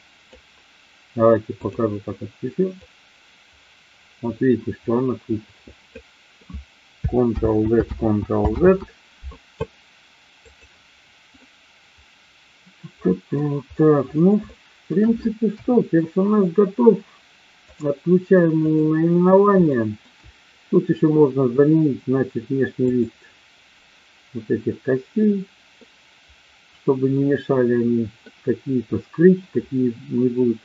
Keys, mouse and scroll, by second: 2.8-5.8 drag, 7.3 ctrl+z, 7.8 ctrl+z, 10.5 click, 11.2-13.3 middle drag, 14.3-14.7 shift+middle drag, 15.5 KP_1, 17.6 click, 19.7 shift+middle click, 22.7 click, 25.7-28.2 middle drag.